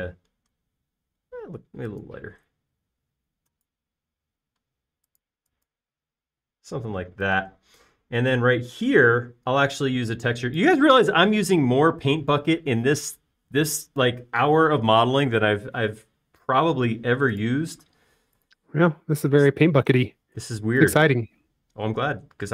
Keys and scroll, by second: 7.7 space.